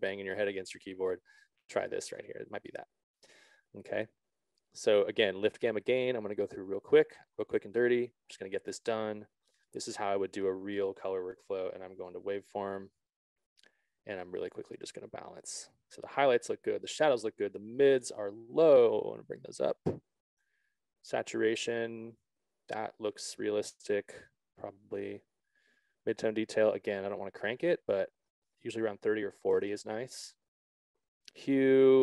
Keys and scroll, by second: 30.2 Return.